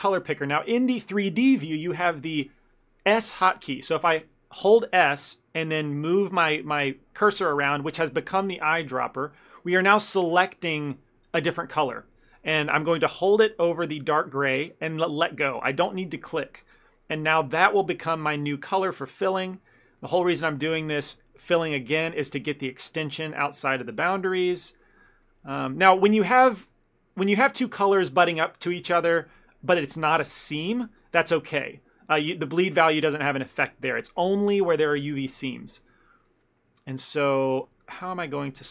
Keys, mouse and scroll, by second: 17.5 middle click, 18.8 ctrl+middle click, 20.1 middle click, 20.5 ctrl+middle click, 21.5 click, 22.3 ctrl+middle click, 24.2 shift+middle click, 24.5 middle click, 24.9 shift+middle click, 25.1 ctrl+middle click, 25.6 shift+middle click, 25.9 ctrl+middle click, 26.2 middle click, 26.4 shift+middle click, 26.6 ctrl+middle click, 33.2 ctrl+middle click, 36.3 middle click, 36.8 ctrl+middle click, 37.9 shift+middle click.